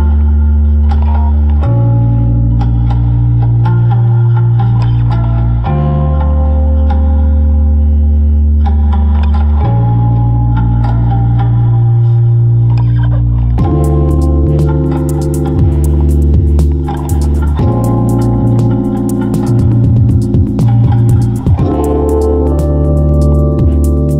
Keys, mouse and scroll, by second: 0.7 Tab, 0.8 Tab, 4.1 Tab, 6.9 ctrl+Tab, 12.5 Tab.